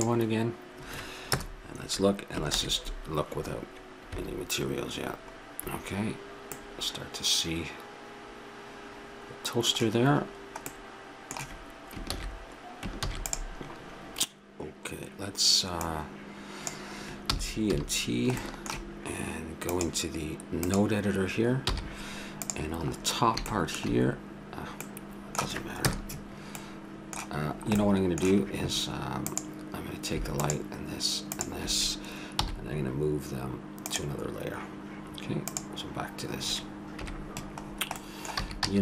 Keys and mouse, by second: 0.0-1.3 drag, 1.3 KP_0, 2.9 shift+z, 3.1 shift+a, 6.7-8.5 middle drag, 10.8 middle click, 12.2 shift+z, 13.0 ctrl+s, 15.8 click, 17.3 t, 17.7 t, 18.9 middle click, 19.7-21.5 drag, 21.8 n, 22.5-24.3 drag, 24.5 click, 25.8 KP_0, 29.4 click, 29.4 right click, 32.3 m, 35.5 click, 37.0 KP_Decimal, 38.4 a, 38.6 a.